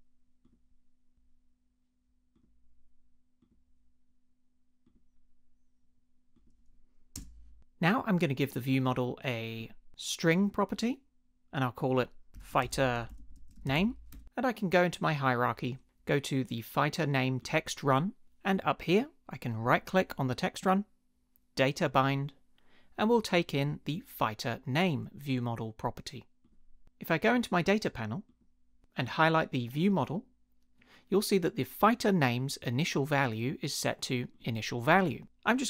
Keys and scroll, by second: 7.1 space, 12.1-14.2 typing, 35.4-35.6 typing.